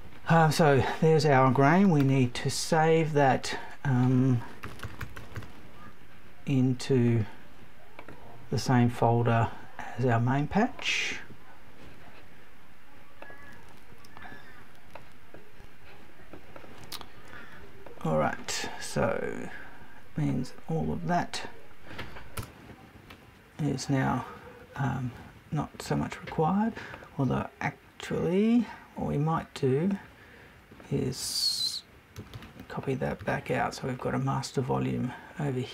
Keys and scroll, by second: 22.4 BackSpace.